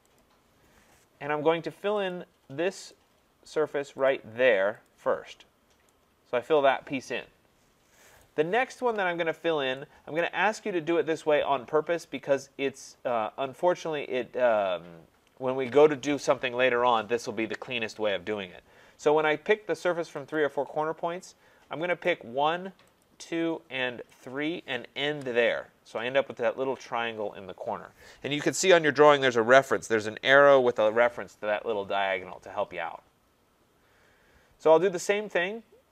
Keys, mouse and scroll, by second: 0.2 click, 2.1 click, 2.9 click, 4.1 click, 4.9 click, 8.2 right click, 8.6 scroll, 9.3 scroll, 10.2 right click, 10.6 middle click, 13.3 scroll, 20.4 click, 22.1 click, 23.0 click, 24.2 click, 25.1 Return, 33.2-35.9 scroll up 3.